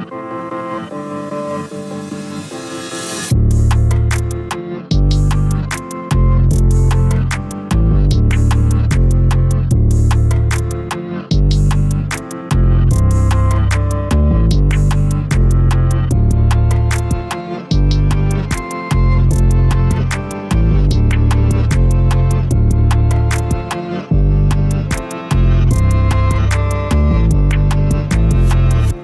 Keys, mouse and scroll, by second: 2.3 a, 3.0-3.8 scroll down 1, 6.8-7.8 middle drag, 7.8 click, 8.1-8.7 scroll up 1, 8.7-10.5 shift+middle drag, 10.5 g, 12.3 click, 12.9-14.6 middle drag, 14.6 KP_0, 15.2 a, 15.4 a, 17.0 click, 23.1 click, 24.2 click, 25.4-28.5 drag.